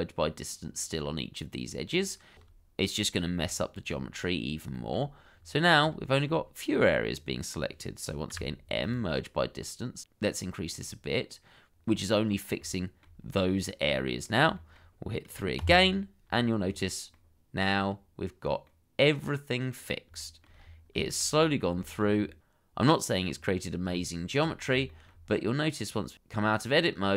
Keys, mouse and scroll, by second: 2.5 middle click, 4.5 shift+middle click, 5.1-5.5 scroll up 1, 5.6 shift+middle click, 6.1-6.4 scroll down 1, 6.6 shift+middle click, 7.4-7.8 scroll up 1, 8.3 m, 11.8-12.3 scroll down 1, 13.3 shift+middle click, 14.6 shift+middle click, 15.6 3, 16.6 scroll down 1, 17.1 middle click, 20.2 shift+middle click, 20.5-21.7 scroll up 3, 21.8 shift+middle click, 22.1-22.8 scroll up 1, 23.4 scroll down 1, 23.9 middle click, 26.2 Tab, 26.9 shift+middle click.